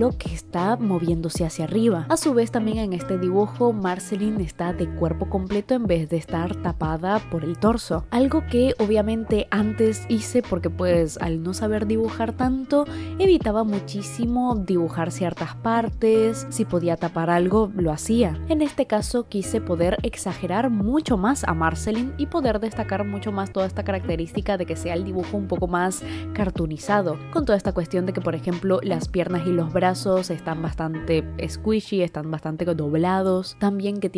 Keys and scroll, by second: 1.6 i, 17.3 i, 24.5 i, 28.5 i.